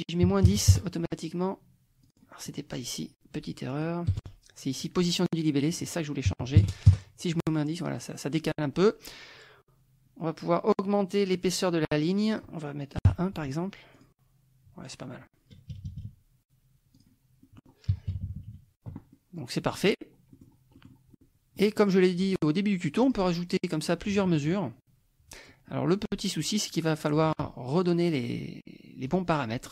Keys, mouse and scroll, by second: 0.3 KP_Subtract, 0.5 KP_1, 0.7 KP_Enter, 2.1 click, 2.4 click, 3.7 click, 4.1 KP_0, 5.1 click, 5.9 click, 6.3 KP_Subtract, 6.6 KP_1, 6.9 KP_Enter, 12.3 click, 13.1 KP_1, 14.0 click, 15.7 KP_Subtract, 16.9 click, 17.5 click, 18.1 KP_Subtract, 19.1 click, 19.8 click, 20.3 click, 20.8 click, 21.2 click, 23.1 click, 24.6 click, 27.9 click, 29.1 click.